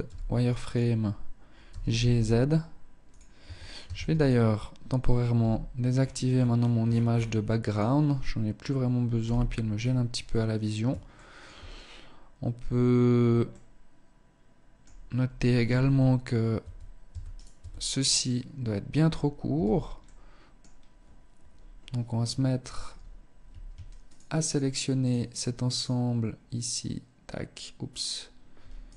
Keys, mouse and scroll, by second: 0.8 g, 2.3 click, 2.5 Tab, 3.1 ctrl+s, 4.5 n, 5.2-6.5 scroll down 15, 6.9 click, 8.3 n, 8.9-10.0 scroll up 5, 10.3 shift+middle click, 12.6 middle click, 14.8 z, 15.1-15.8 scroll up 1, 15.8 Tab, 16.2 Tab, 16.5 right click, 16.7 Tab, 17.5-18.7 scroll up 1, 18.7-19.1 scroll up 1, 18.7 a, 19.1 middle click, 23.2 alt+shift+right click, 23.5 alt+shift+right click, 24.9 alt+shift+right click, 28.0 ctrl+alt+shift+right click.